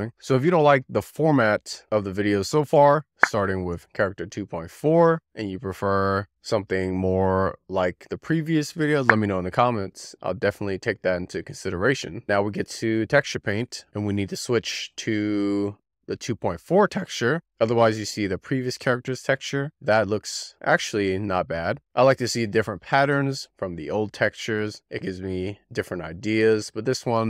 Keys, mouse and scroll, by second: 12.1 scroll down 1, 12.6 click, 13.7-17.6 drag, 18.6-20.0 shift+middle drag, 20.0-22.0 drag, 22.0-22.5 scroll down 2, 22.5-24.4 shift+middle drag, 24.4 click, 25.0 click.